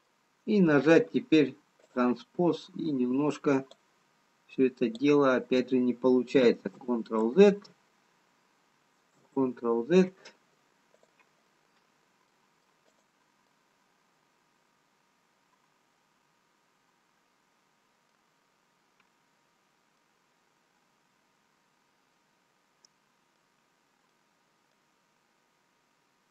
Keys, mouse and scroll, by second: 2.3 click, 3.9 click, 6.8 ctrl+z, 7.6 ctrl+z, 10.9 click, 12.6 middle click, 12.6 scroll down 1, 14.1 middle click, 14.1 click, 20.9 middle click, 24.9 middle click, 24.9 scroll up 1, 25.9-26.3 scroll up 2.